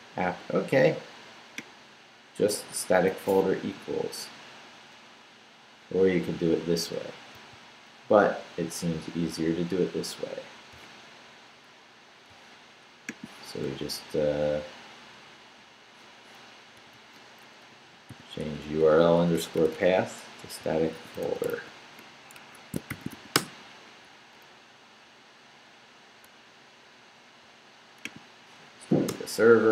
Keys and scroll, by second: 7.3 super+c, 13.7 Left, 15.3 Left, 16.5 Right, 17.7 Left, 18.1 i, 18.4 BackSpace, 20.2-23.6 typing, 22.3 Escape, 28.7 Up, 29.1 Return.